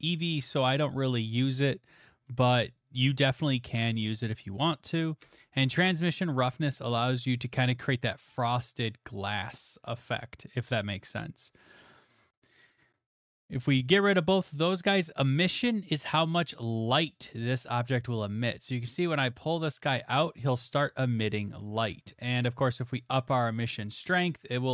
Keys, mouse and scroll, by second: 1.0 middle click, 1.0 middle click, 1.1 middle click, 1.7 middle click, 2.3 middle click, 8.3 click, 11.0 middle click, 13.2 click, 13.9 click, 15.1 click, 18.8 click, 19.1 middle click, 19.2 middle click, 20.5 middle click, 21.0 middle click, 21.3 middle click, 22.0 middle click, 22.1 middle click, 22.1 middle click, 24.3 click.